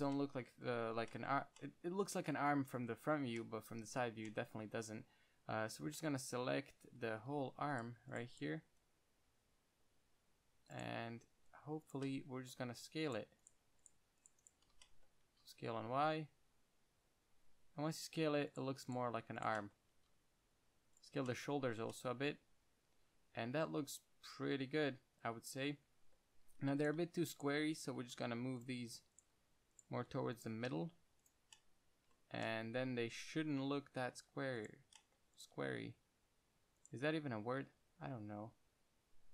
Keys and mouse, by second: 4.3 Tab, 7.2 KP_1, 7.4 z, 8.3 c, 9.0 c, 11.8 c, 12.3 middle drag, 15.1 z, 15.6 s, 18.3 click, 19.9 middle click, 20.2 s, 21.3 click, 21.3-21.8 middle drag, 21.6 click, 27.1-28.9 right drag, 28.3 g, 30.9 right click, 30.9 g, 31.9 middle click, 34.4-36.0 drag, 36.0 g, 37.9 g, 38.9 click.